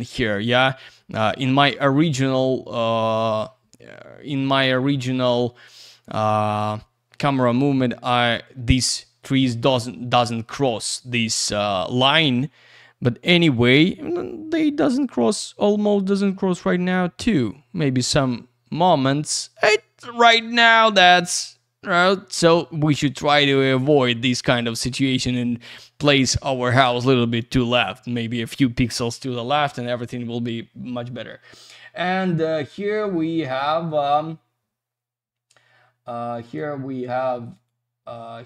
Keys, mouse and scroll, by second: 36.4 click, 36.5 click, 37.5 click, 37.6 click.